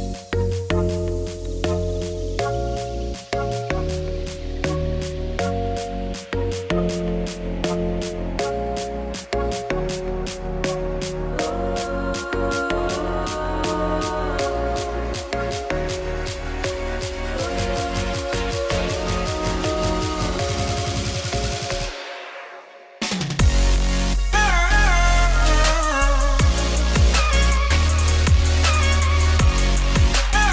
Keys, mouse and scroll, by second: 1.5 click, 2.2 click, 2.6 middle click, 3.0 shift+click, 3.2 middle click, 3.9 shift+click, 4.1 shift+click, 4.6 middle click, 4.9 ctrl+b, 6.1 1, 6.3 click, 6.5 g, 7.2 click, 7.4 g, 7.7 Tab, 8.0 middle click, 8.3 scroll down 4, 8.4 middle click, 9.0 scroll up 3, 9.1 middle click, 9.5 scroll down 1, 9.8 middle click, 10.4 scroll up 3, 10.5 middle click, 11.1 Tab, 11.4 click, 11.5 g, 11.9 middle click, 12.6 z, 13.1 click, 13.2 g, 13.6 Tab, 13.7 middle click, 14.1 z, 14.5 Tab, 14.7 3, 15.0 click, 15.3 middle click, 15.7 ctrl+KP_Add, 16.0 middle click, 16.2 g, 17.4 Tab, 17.6-18.2 scroll down 2, 18.2 middle click, 18.3 scroll down 1, 18.4 shift+middle click, 18.6 scroll up 1, 18.8 middle click, 19.0 click, 19.3 2, 19.6 Left, 20.1 j, 20.7 Left, 21.3 j, 21.6 Tab, 21.9 middle click, 22.5 Tab, 22.8 3, 22.9 Left, 23.0 g, 24.6 Tab, 25.0 middle click, 25.3 alt+d, 26.8 scroll down 1, 27.0-28.2 middle drag.